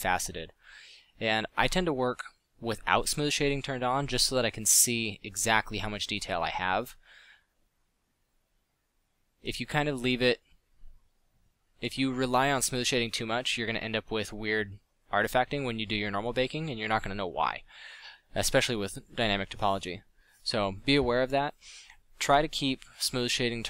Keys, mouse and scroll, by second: 0.5 f, 3.8 f, 5.3 f, 7.5 f, 7.6 drag, 21.1 f, 21.4 f.